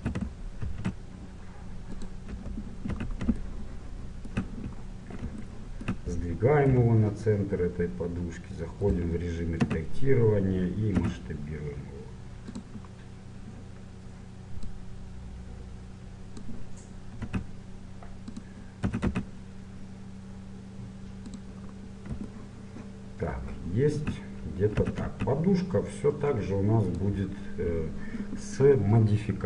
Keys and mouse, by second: 0.0 shift+c, 0.7 shift+a, 2.5 KP_1, 5.6 middle click, 6.7 g, 9.7 Tab, 11.2 s, 14.8-17.0 drag, 17.4 s, 19.0 s, 21.8 middle click, 24.9 s, 27.3-28.4 drag.